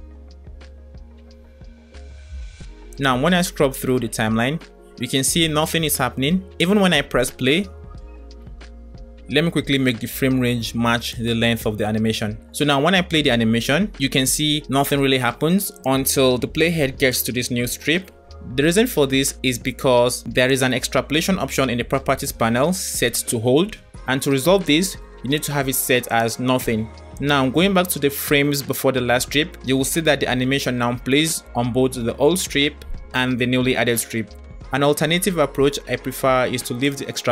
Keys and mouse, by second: 0.1 click, 0.3-0.9 middle drag, 3.0-5.3 drag, 6.2 space, 9.3 space, 11.3 click, 12.7 space, 14.7 space, 15.8 drag, 16.6 space, 18.3 space, 25.3-26.5 drag, 27.5 click, 34.5 space, 36.8-37.3 drag.